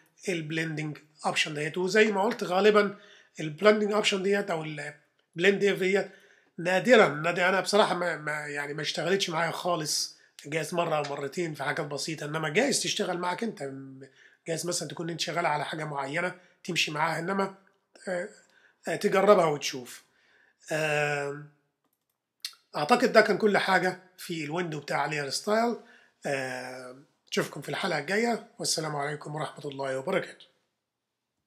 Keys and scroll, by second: 12.9 super++, 14.0 super+-, 14.9 super++, 19.7 super+-.